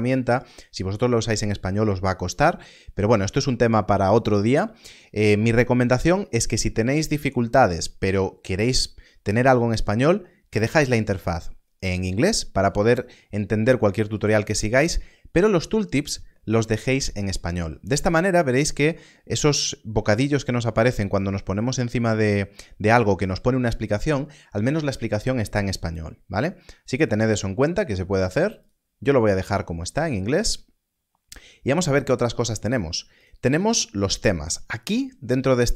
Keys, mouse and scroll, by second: 9.8 click, 28.5 click, 33.1 click, 35.1-35.7 scroll down 1.